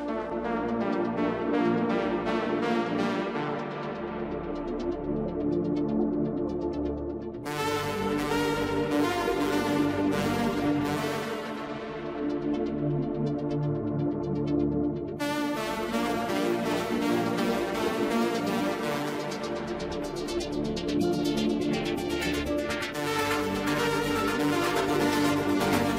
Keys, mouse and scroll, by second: 4.6-4.9 scroll up 1, 4.9-7.0 middle drag, 7.0-8.9 scroll up 1, 8.9-12.0 drag, 16.6-18.6 drag, 18.6-18.9 scroll down 2, 18.9-20.9 middle drag, 20.9 Tab.